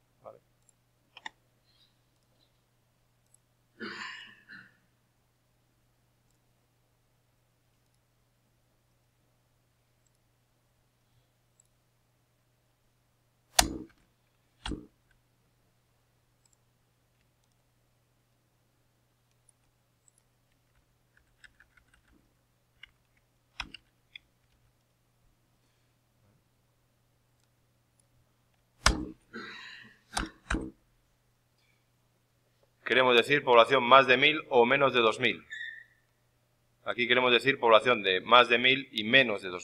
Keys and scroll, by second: 13.9 ctrl+v, 20.6 shift+Left, 22.7 shift+End, 23.5 ctrl+c, 23.7 Down, 24.0 e, 24.3 End, 24.4 c, 28.7 shift+o.